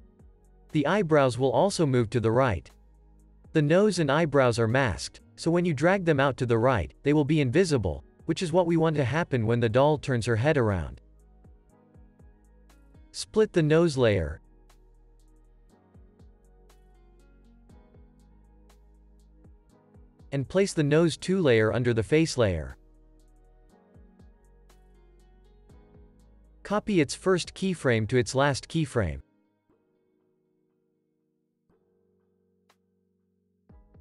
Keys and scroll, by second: 0.8 p, 19.9 shift+super+d, 27.1 p, 28.9 super+c, 29.2 super+v.